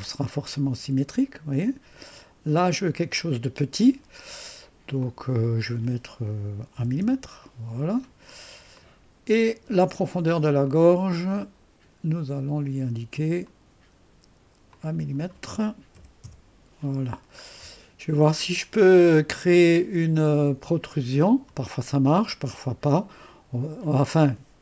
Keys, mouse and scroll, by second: 0.2-2.0 drag, 2.8 click, 5.0 click, 6.7-7.5 typing, 9.8 right click, 10.6 click, 10.6 typing, 13.4 click, 13.6-14.3 typing, 14.7 click, 15.6 typing, 16.2 Return, 17.4-18.4 scroll down 1, 17.4 typing, 21.2 click.